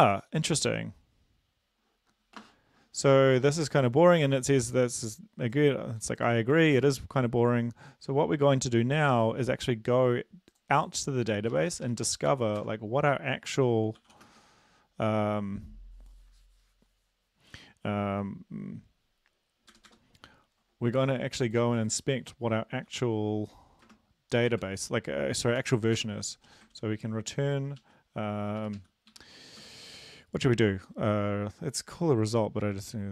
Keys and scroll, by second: 11.5 Up, 11.7 Up, 11.9 Up, 12.6 Up, 12.6 Return, 14.0-14.4 typing, 19.7 Return, 19.9 Return, 22.9 ctrl+b, 23.9 space, 24.5 BackSpace, 26.2 Return, 26.4 Down, 27.8 Right, 28.6 Up, 28.7-29.6 typing.